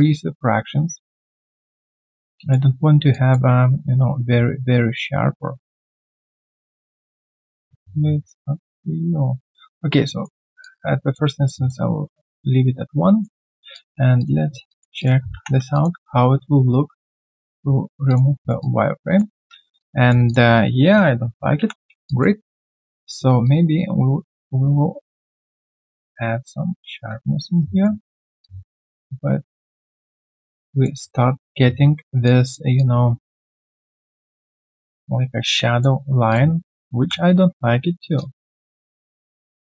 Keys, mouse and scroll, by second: 3.1 alt+click, 3.8 middle click, 10.4 middle click, 10.6 alt+click, 12.9 right click, 13.7 alt+click, 14.4 alt+scroll down 1, 14.7 alt+click, 15.0 alt+click, 15.6 3, 15.7 alt+click, 18.4 alt+right click, 18.6 alt+click, 19.8 alt+click, 21.6 t, 22.0 alt+click, 22.4 alt+middle click, 22.7 alt+click, 27.6 right click, 30.6 alt+click, 35.5 alt+click.